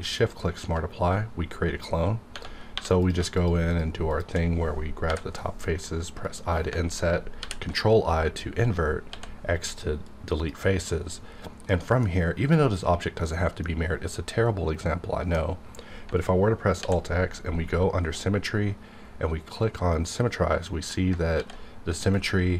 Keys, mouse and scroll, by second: 0.1 shift+click, 2.8 3, 3.0 click, 3.3 shift+click, 6.2 click, 9.1 x, 11.0-11.5 scroll up 4, 11.5 scroll down 1, 11.7 middle click, 11.7 middle click, 12.2 scroll up 1, 13.6 middle click, 13.9 middle click, 14.0 middle click, 16.8 alt+x, 17.4-18.2 alt+scroll down 1, 19.9 click, 21.4 alt+x, 22.1 click.